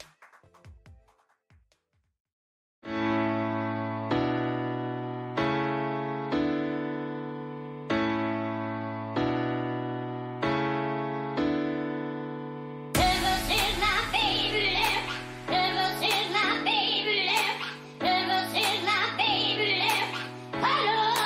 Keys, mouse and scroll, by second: 0.3-1.4 drag, 1.2-3.2 middle drag, 5.8-8.7 middle drag, 13.3-16.2 middle drag, 16.2 Tab, 17.7-20.0 middle drag.